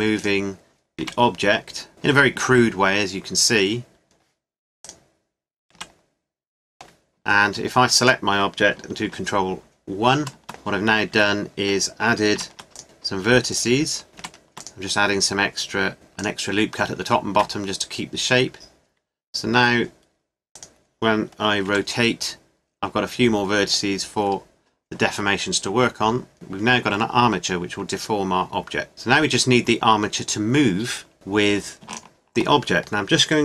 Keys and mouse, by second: 0.2-1.9 right drag, 1.0 r, 4.8-6.7 right drag, 5.7 r, 7.9 click, 8.9-10.2 right drag, 10.2 ctrl+1, 11.1 Tab, 12.3 ctrl+r, 14.2 ctrl+r, 17.3 Tab, 20.5-22.3 drag, 21.7 r, 26.3 Tab, 28.9-30.0 middle drag, 30.0-31.9 middle drag, 31.9-33.4 right drag.